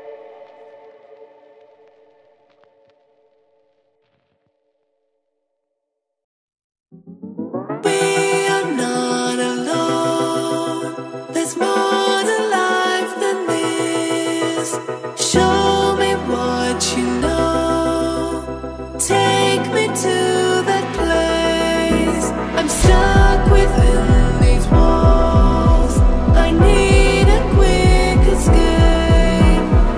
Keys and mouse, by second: 0.6 shift+middle click, 2.2-3.2 middle drag, 3.7 shift+z, 4.7-5.5 middle drag, 6.5 s, 7.5 z, 8.3 click, 9.0 z, 10.1 click, 10.6 s, 11.6 click, 12.7 KP_1, 13.8 shift+z, 14.4 shift+drag, 14.6 shift+middle click, 15.7 z, 17.8 click, 18.3 s, 20.4-22.3 drag, 23.9 click, 25.3 click, 27.7 middle click, 28.6 shift+middle click, 29.2-29.6 ctrl+middle drag.